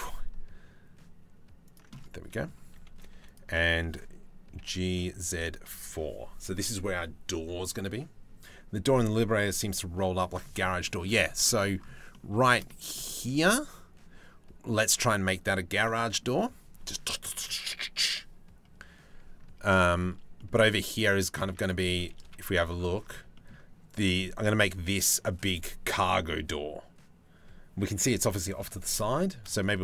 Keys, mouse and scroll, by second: 1.5 middle click, 2.7 3, 2.9 click, 4.1 g, 10.2 shift+middle click, 10.4 middle click, 11.7 click, 12.0 shift+middle click, 12.1 click, 12.6 shift+middle click, 15.4 middle click, 19.4 shift+middle click, 19.9 middle click, 21.0 Tab, 21.2 click, 21.8 KP_Decimal, 28.1 middle click, 28.6 middle click.